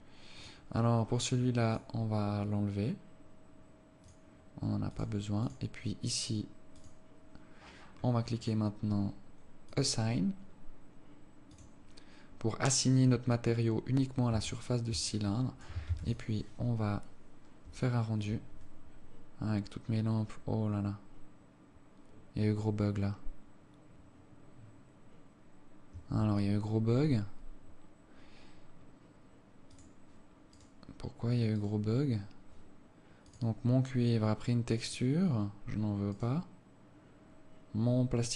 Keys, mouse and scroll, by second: 0.7 click, 1.3-2.0 scroll up 7, 2.0 click, 4.4 click, 5.2 click, 5.8 click, 7.1 click, 8.5-9.0 scroll up 4, 10.0 click, 10.6-11.5 scroll up 3, 11.8 click, 14.8 Tab, 15.4 alt+click, 16.2 ctrl+s, 26.6 Escape, 27.4 scroll down 3, 28.2 scroll up 1, 29.0-29.4 scroll up 3, 30.0 click, 30.9 right click, 32.0 right click, 33.6 click, 35.6 click, 36.4 right click.